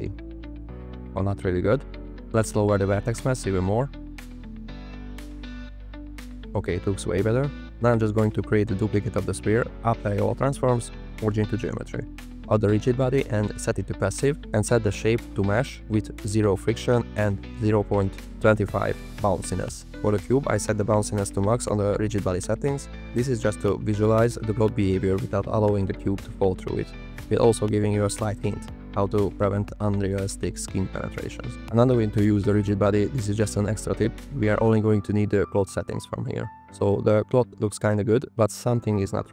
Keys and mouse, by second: 2.4-3.8 drag, 5.4 click, 7.7 shift+d, 8.8 s, 9.6 click, 10.4 s, 10.6-11.6 drag, 11.8-12.6 drag, 13.0 click, 14.0-14.5 drag, 14.8 click, 16.9 click, 20.1 click, 21.6 click, 24.0 click, 24.6 click, 27.6 space, 28.6-30.2 drag, 32.6 space, 33.6 click, 37.5 space, 38.5 click.